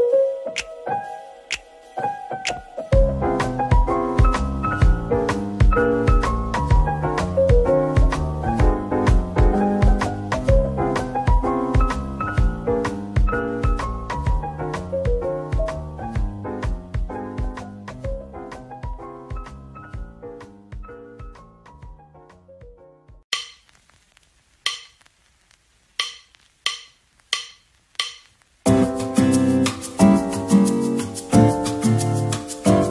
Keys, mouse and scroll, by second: 0.8-1.6 typing, 3.0 middle click, 7.1 typing, 7.9 alt+click, 9.0 scroll down 1, 10.0 shift+click, 10.5 middle click, 12.4-13.1 typing, 14.2 middle click, 17.0-19.8 typing, 21.2-22.1 typing, 23.2 middle click, 23.9 Tab, 24.4 middle click, 25.2-25.5 scroll up 1, 25.5 Tab, 25.9 middle click, 26.4 ctrl+r, 26.7-27.0 scroll up 1, 29.0 double click, 30.0 a, 30.3 right click, 32.5 x.